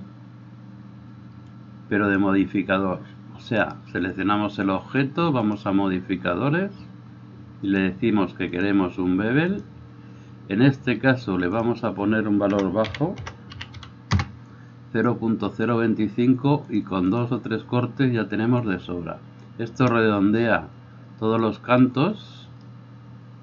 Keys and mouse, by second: 0.0-1.6 middle drag, 1.6-5.7 drag, 3.7-5.7 right drag, 5.7-7.8 middle drag, 7.8-22.9 drag, 23.1-23.4 drag.